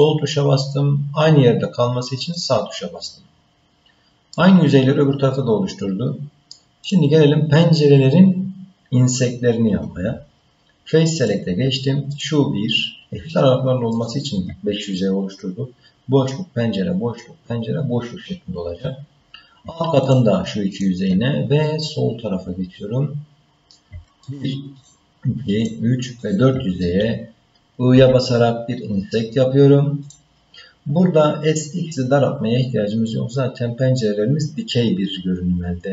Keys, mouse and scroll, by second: 4.3-6.6 middle drag, 6.8 click, 11.2 click, 12.1 click, 13.9 shift+click, 20.0 shift+click, 20.7 shift+click, 21.6-23.7 middle drag, 24.2 shift+click, 24.8 shift+click, 25.6 shift+click, 26.2 shift+click.